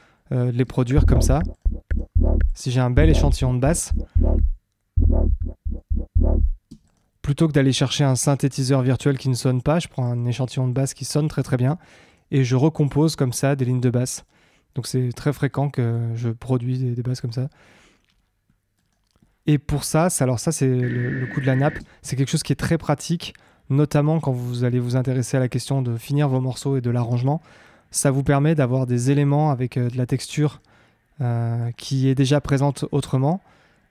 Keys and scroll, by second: 0.6 space, 6.6 space, 20.7 space.